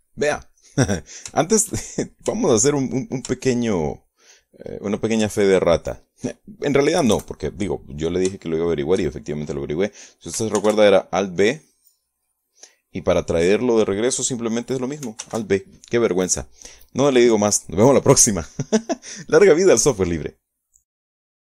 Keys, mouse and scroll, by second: 0.1 click, 1.2 click, 2.1 shift+click, 3.0 shift+click, 4.0-5.3 shift+drag, 6.3 shift+click, 7.6 KP_Add, 8.9 shift+click, 11.2 alt+b, 12.0 click, 15.8 alt+b.